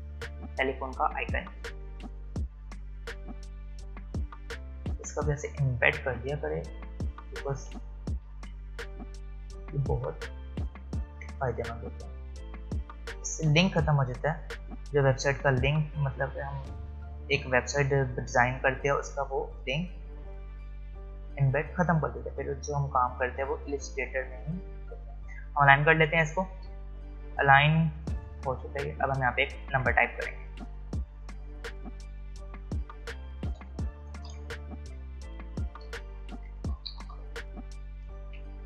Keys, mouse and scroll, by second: 1.5-2.3 scroll up 1, 2.3-9.9 drag, 9.9-17.6 alt+shift+drag, 17.6-18.0 alt+scroll up 1, 19.1-21.3 alt+shift+drag, 21.3 alt+shift+click, 29.0-29.5 alt+scroll down 1, 29.8 space, 30.0 click, 30.3 space, 31.6 click, 38.3 `.